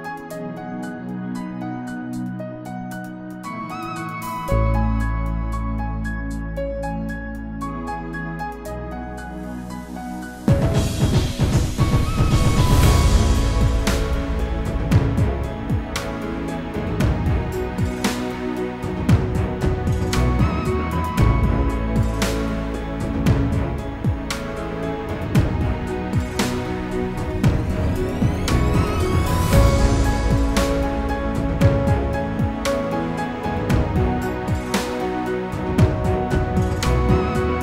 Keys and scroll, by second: 22.9 ctrl+c, 23.5 ctrl+f, 36.6 ctrl+c, 37.2 ctrl+f.